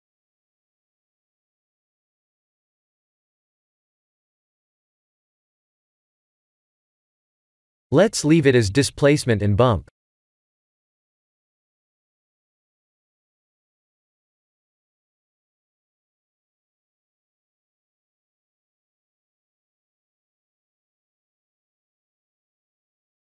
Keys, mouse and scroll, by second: 8.1 click, 9.5 click, 12.5 click, 16.8 click, 17.8-19.2 scroll up 7, 18.6 middle click, 20.1 click, 22.6 KP_0.